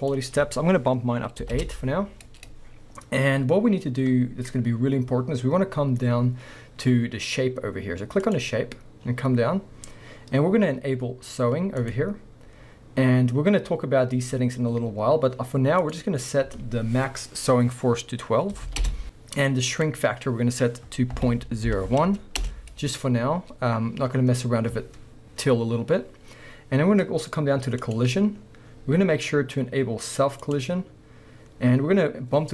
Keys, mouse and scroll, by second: 1.6 Return, 3.7-8.3 scroll down 1, 9.0-11.8 scroll down 1, 15.9-30.5 drag, 18.8 Return, 22.4 Return, 26.7-27.8 scroll down 1, 28.3-30.4 scroll down 1.